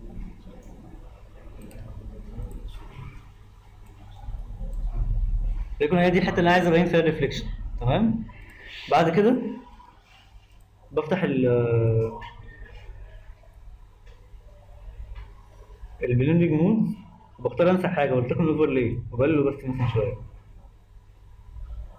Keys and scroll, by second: 0.1 ctrl+z.